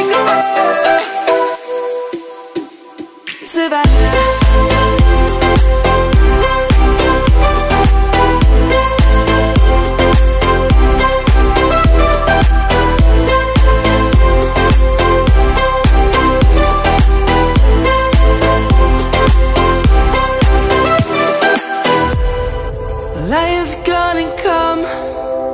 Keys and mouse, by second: 0.0 click, 1.1 click, 20.9 Tab, 21.5 click, 21.9 middle click, 24.0 click, 25.1 middle click.